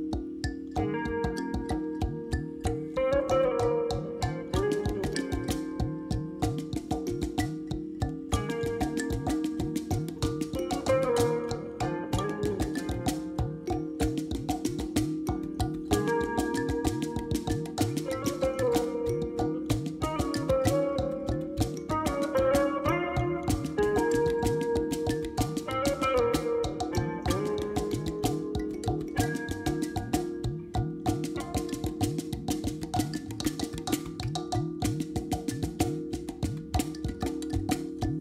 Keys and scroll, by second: 6.3 ctrl+j, 8.3 3, 9.7 Tab, 11.6 shift+z, 12.6 alt+a, 13.3 1, 19.6 o, 25.4 g, 28.8 z.